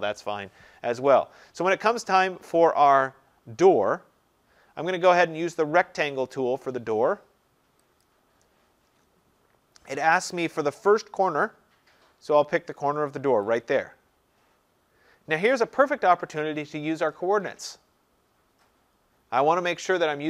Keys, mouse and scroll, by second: 1.6-2.4 scroll, 2.4-6.0 scroll, 8.1 click, 13.6 click.